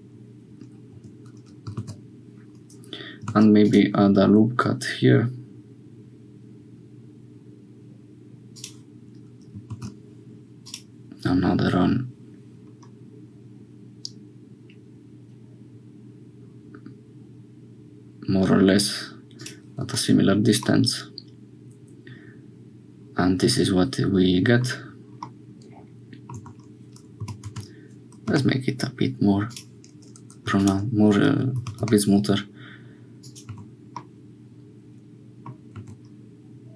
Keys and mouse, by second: 1.8 ctrl+z, 3.2 ctrl+r, 9.6 ctrl+r, 19.8 Tab, 20.7-24.6 middle drag, 25.2-26.7 middle drag, 26.4 Tab, 27.2 g, 31.5 g, 33.5 Tab, 34.0-35.5 drag, 35.8 Tab.